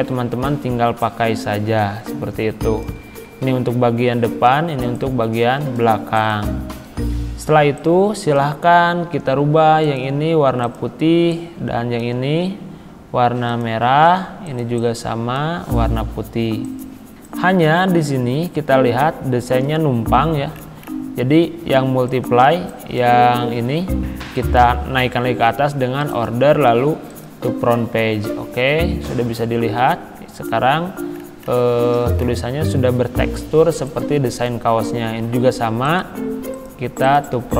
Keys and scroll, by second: 23.6 ctrl+z.